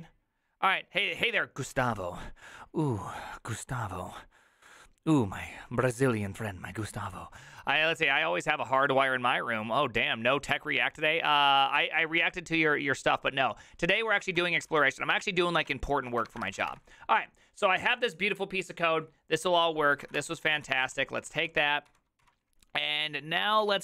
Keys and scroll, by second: 14.7 alt+f, 14.7 alt+h, 15.3 alt+{, 16.1 ctrl+a, 16.3 1, 16.4 ctrl+c, 16.6 ctrl+:, 16.6 w, 16.7 Return, 19.9-23.8 typing.